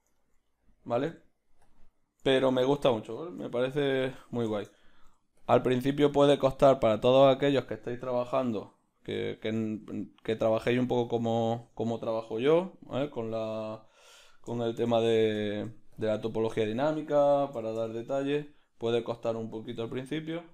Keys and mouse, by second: 0.1-12.5 ctrl+middle drag, 1.7 o, 3.9 o, 5.0 g, 12.5-16.5 drag, 12.5 BackSpace, 14.7 shift+d, 16.5-17.6 right drag, 17.6 r.